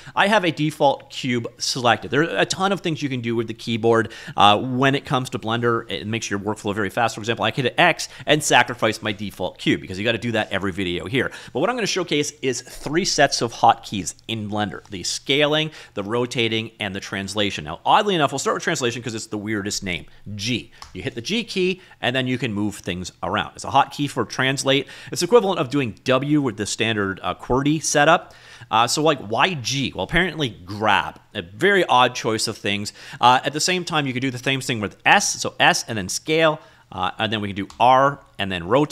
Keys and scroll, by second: 7.0 x, 10.0 ctrl+z, 20.9 g, 28.9 ctrl+z, 35.2 s, 37.1 ctrl+z, 37.8 r.